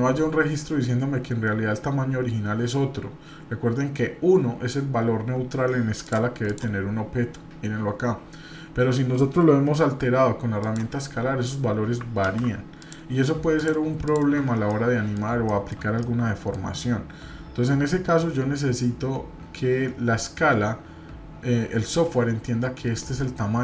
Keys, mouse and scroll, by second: 6.0 click, 6.4 click, 12.3 ctrl+z, 12.8 click, 13.5 shift+click, 14.7 middle click, 15.5 shift+middle click, 16.0 middle click.